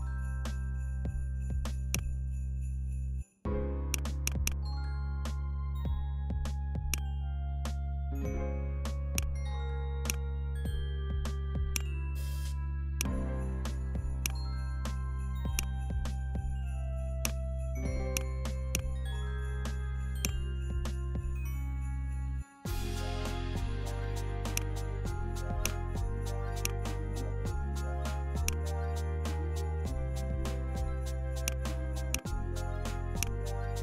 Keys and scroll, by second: 0.8 BackSpace.